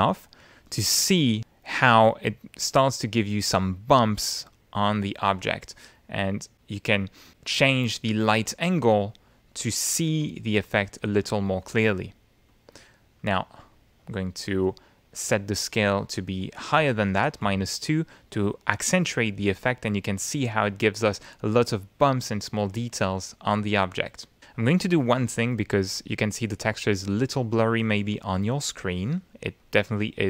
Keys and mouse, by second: 0.2 click, 0.9 click, 1.3 click, 4.5 click, 6.0-9.5 drag, 11.8-13.2 drag, 14.0 click, 14.8 click, 16.1 click, 17.7 -, 18.0 2, 18.3 Return, 20.2-22.1 middle drag, 23.6 click, 25.9 click.